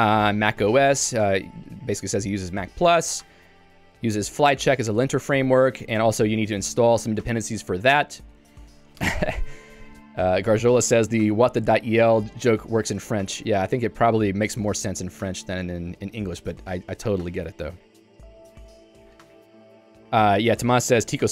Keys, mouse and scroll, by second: 1.3 k, 2.3 j, 6.9 k, 8.3 Escape, 13.3 Escape.